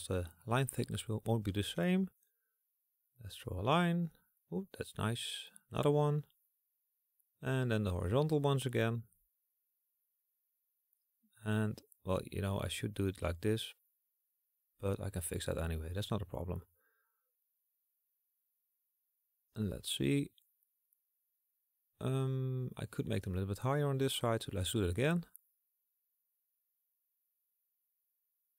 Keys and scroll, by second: 22.9 ctrl+z, 24.9 KP_1, 27.1 ctrl+KP_1.